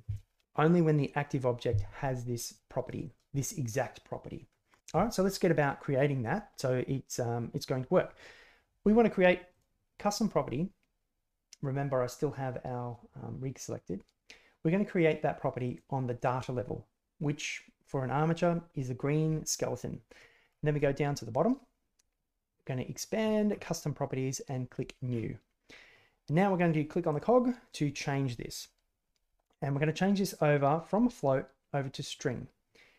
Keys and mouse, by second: 2.4 click, 2.8 click, 3.0 click, 9.5 click, 22.9 click, 24.7 click, 27.0-32.9 drag.